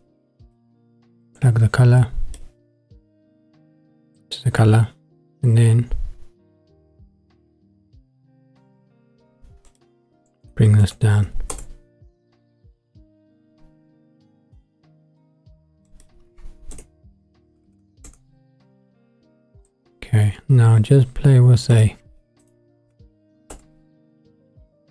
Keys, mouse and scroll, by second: 1.2-2.4 drag, 6.0-9.2 scroll up 7, 9.7-11.6 drag, 12.7-15.9 middle drag, 15.9-18.1 drag, 17.6 KP_0, 17.8 KP_0, 21.7-23.7 drag.